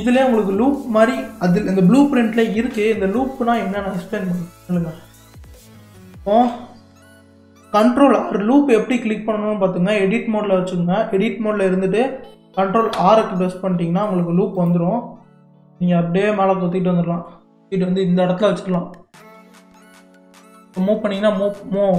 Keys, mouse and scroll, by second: 4.9 scroll down 4, 13.0 ctrl+r.